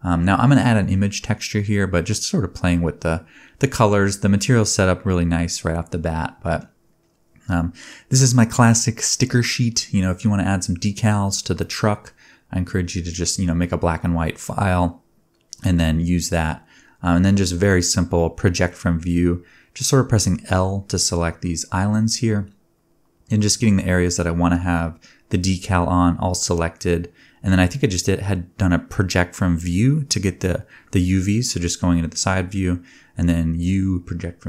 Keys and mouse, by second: 5.3-7.2 middle drag, 7.2-8.4 drag, 7.9 Tab, 8.4 a, 9.7 KP_1, 10.0 KP_3, 10.5 u, 11.1-12.4 drag, 11.9 a, 12.1 s, 12.4 middle click, 12.4 g, 12.8-13.9 shift+drag, 13.0 shift+middle click, 13.2 alt+z, 13.6 alt+a, 14.2 alt+z, 15.1-17.2 typing, 15.9-18.3 drag, 18.3 middle click, 18.5 l, 18.8 l, 19.2-20.7 drag, 19.2 l, 20.7-23.1 middle drag, 23.1-25.6 drag, 23.5 l, 25.6 middle click, 25.6 l, 25.9 click, 25.9 middle click, 26.0 click, 26.3 middle click, 26.3 click, 26.5 middle click, 26.9 click, 27.2 KP_1, 27.2-28.7 middle drag, 27.7 KP_3, 28.7-34.4 drag, 29.1 g, 29.4 s, 32.6 g.